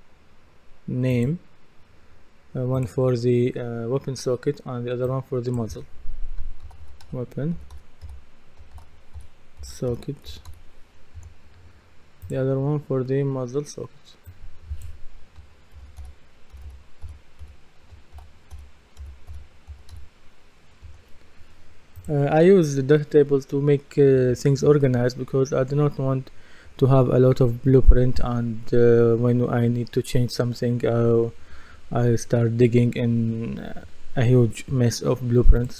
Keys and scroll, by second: 6.4-10.8 typing, 11.2 Return, 15.7-20.2 typing, 20.8 Return.